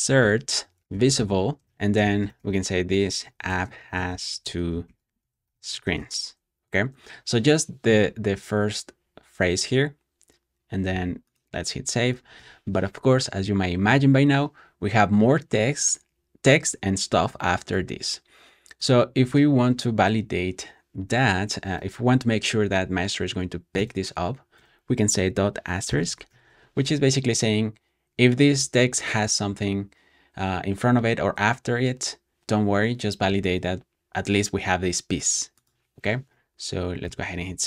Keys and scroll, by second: 0.0-6.4 typing, 12.3 super+s, 13.6 ⟲, 23.7 i, 24.4 ., 25.8 shift+8, 26.2 super+s, 36.9 super+s, 37.3 super+j, 37.4 super+j.